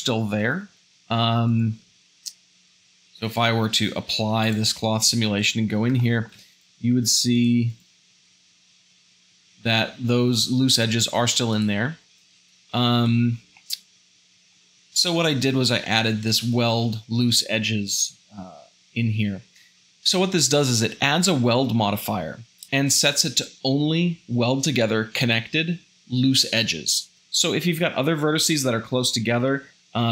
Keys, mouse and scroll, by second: 1.9 Tab, 2.8 Left, 5.1 Tab, 6.0-7.0 shift+middle drag, 7.0 g, 8.3 o.